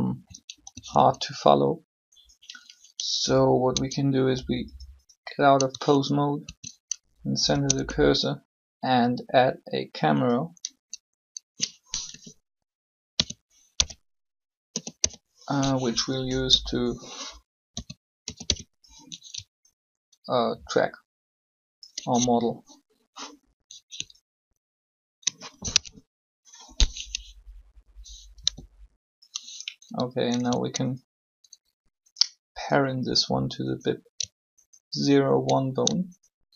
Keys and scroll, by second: 0.5 alt+shift+a, 3.1 Tab, 3.7 Tab, 6.4 shift+c, 7.4 space, 11.8 7, 12.8-14.9 typing, 16.5 1, 17.6-18.4 typing, 25.7 ctrl+0, 28.4 g.